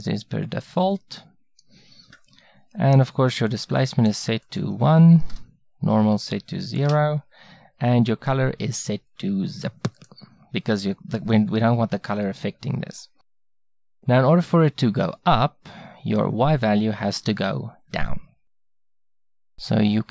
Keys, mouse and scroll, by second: 1.2-3.8 middle drag, 3.8-11.9 drag, 17.2-20.1 middle drag.